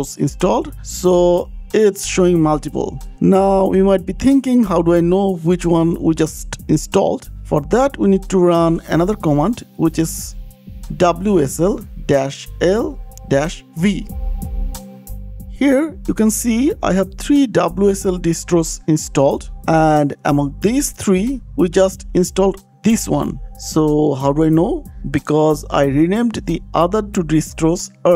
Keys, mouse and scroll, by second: 1.8 click, 9.8 click, 10.0 click, 10.2 shift+click, 10.8 click, 11.6-14.9 typing, 15.1 Return, 18.7 click, 19.8 click, 25.5 click, 26.2 click, 27.2 click.